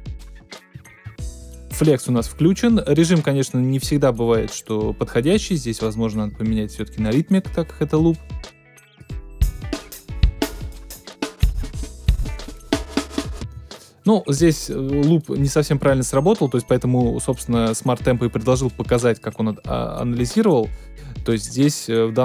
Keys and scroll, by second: 9.4 space, 13.4 space.